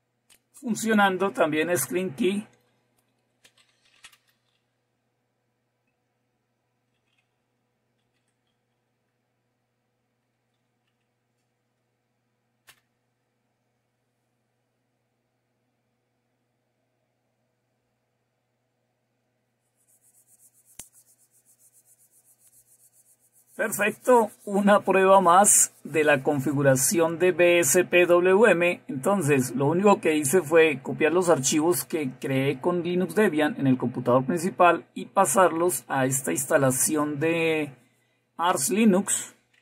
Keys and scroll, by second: 3.5-5.4 typing, 7.5-11.0 typing, 11.1 Tab, 12.7 Return, 15.6-16.6 typing.